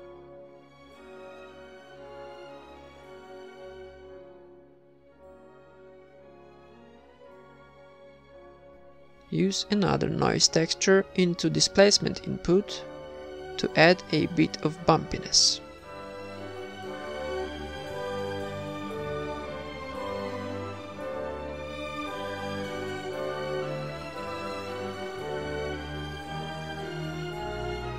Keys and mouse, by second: 0.1 b, 0.1 g, 1.4 ctrl+s, 3.1 click, 3.7-5.0 drag, 5.3 click, 6.8 click, 9.2 click, 10.0 click, 11.5 ctrl+s, 11.9 shift+b, 12.0-13.4 middle drag, 13.4-15.7 typing, 14.3 click, 14.6 click, 14.6 right click, 15.5 middle click, 16.2 click, 18.9 click, 23.5 middle click, 24.3-25.6 drag, 25.7 click, 26.0 middle click, 26.7 click, 27.2-27.9 middle drag, 27.6 ctrl+s.